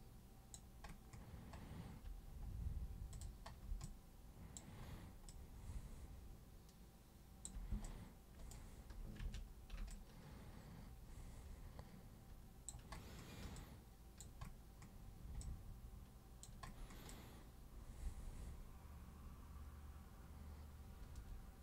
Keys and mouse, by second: 3.1 super+click, 3.9 alt+click, 5.3-7.5 alt+drag, 7.9 right click, 9.2 ctrl+1, 9.9-12.7 alt+super+drag, 13.6 alt+super+click, 15.4-16.4 alt+super+drag, 17.1-21.6 alt+super+drag.